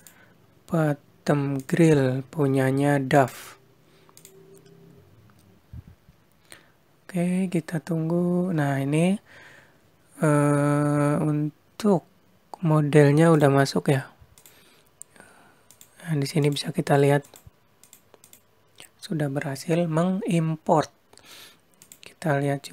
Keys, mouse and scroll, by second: 8.4-9.2 scroll up 2, 13.3 click, 14.4 click, 16.5 click, 18.2 click, 21.7 click.